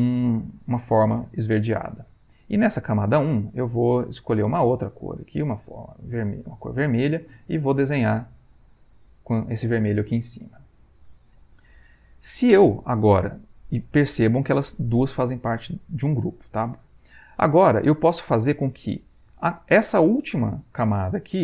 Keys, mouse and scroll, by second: 2.8 click, 3.6 right click, 4.9 click, 5.3 click, 6.5 click, 7.4 click, 8.7-9.7 drag, 14.2 click, 14.8 click.